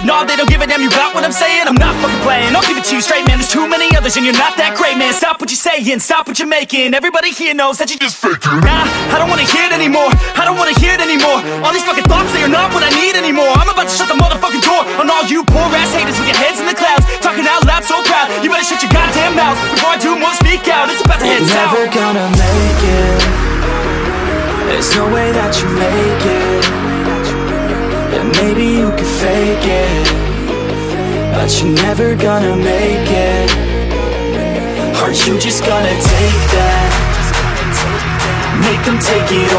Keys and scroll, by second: 8.0 ctrl+t, 9.3 ctrl+t, 14.1 ctrl+t, 15.3 ctrl+d, 16.7 ctrl+d, 26.2 ctrl+j, 37.0 ctrl+d.